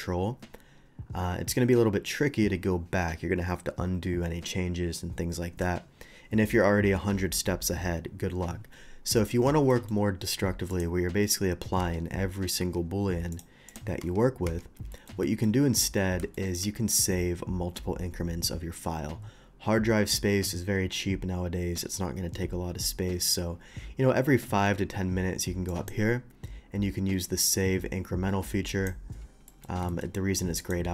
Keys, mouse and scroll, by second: 9.7 middle click, 10.7 click, 11.8 Tab, 13.3 click, 13.6 click, 14.4 Tab, 14.9 shift+middle drag, 15.2 shift+middle click, 16.3 middle drag, 25.6 click, 28.7 click, 29.4 middle click, 29.8 shift+middle drag, 30.6 shift+click.